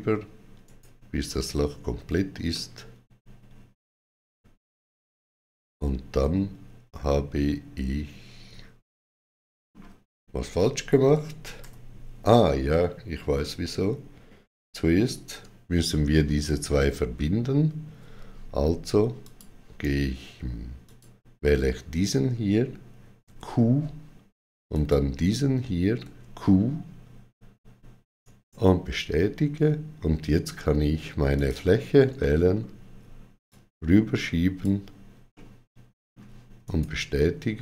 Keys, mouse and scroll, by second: 0.5 right click, 2.4 middle click, 11.4 ctrl+z, 19.0 ctrl+z, 19.0 click, 19.0 middle click, 20.6 click, 20.7 click, 23.1 q, 24.5 click, 25.8 q, 28.0 right click, 31.2 click, 31.2 right click, 31.2 q, 32.0 middle click, 33.3 click, 35.2 middle click, 36.5 right click, 36.5 click.